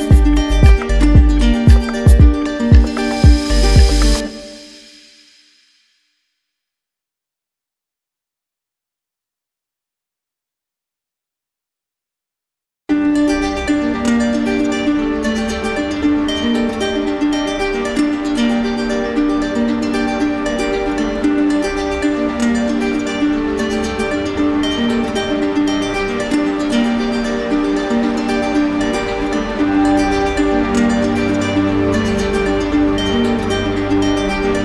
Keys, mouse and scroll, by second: 2.7 click, 3.6 click, 4.7 click, 5.5 click, 9.2 click, 9.6 ctrl+d, 11.1-12.2 drag, 17.5 click, 18.3 click, 19.3 click, 20.7 click, 21.0 ctrl+d, 22.9-24.0 drag, 25.4-26.5 drag, 34.5 click.